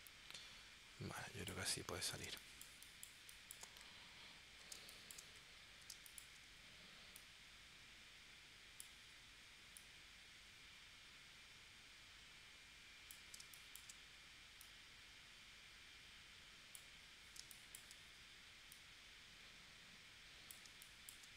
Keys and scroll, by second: 2.2 space, 4.8 space, 5.9 space, 13.4 space, 17.4 space, 20.7 space.